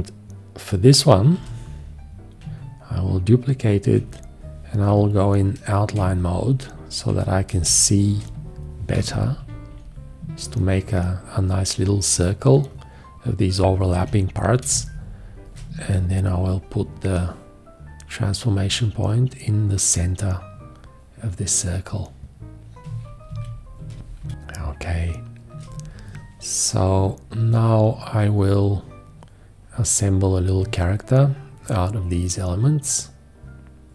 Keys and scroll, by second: 1.3 v, 4.9 F3, 5.9 ctrl+space, 7.0 ctrl+space, 7.5 space, 9.4 shift+Down, 14.0 q, 14.7 space, 23.3 ctrl+a, 24.0 space, 24.2 F3, 24.3 space.